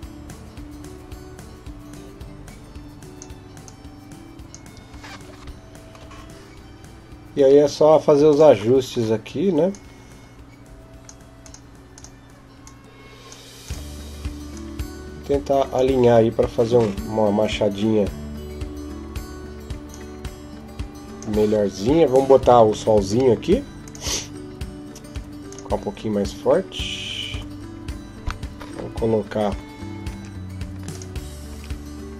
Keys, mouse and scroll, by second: 22.1 Escape, 22.1 click, 22.3 scroll down 3, 22.5 scroll up 1, 22.6 scroll down 3, 23.6 right click, 23.6-25.3 scroll down 2, 25.3 click, 27.1 KP_7, 29.9 g, 31.3 r.